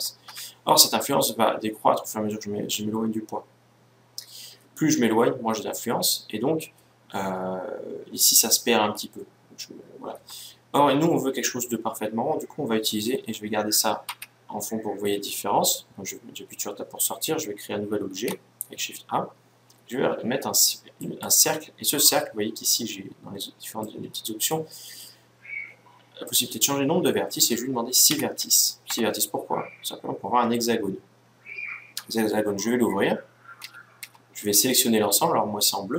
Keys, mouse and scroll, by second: 12.9 Escape, 13.8 Tab, 17.8 shift+a, 23.5-25.3 drag, 26.0-27.6 drag, 31.6 Tab, 33.3 a, 33.7 a.